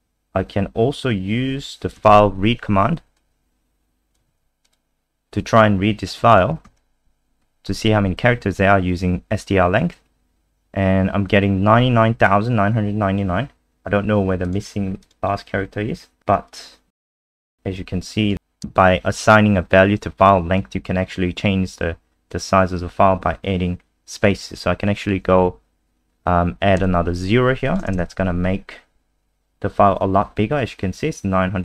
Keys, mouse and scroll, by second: 0.0-0.9 scroll down 1, 2.1 ctrl+c, 3.2 click, 4.3 ctrl+v, 4.6 click, 6.3 click, 6.6 ctrl+s, 7.4 F5, 14.4 click, 15.5-16.1 scroll down 2, 16.2 scroll down 2, 16.5 click, 16.9 ctrl+c, 17.4 click, 17.4 ctrl+z, 17.9 click, 18.1 click, 26.8 0, 27.6 click, 27.9 ctrl+s, 28.3 F5.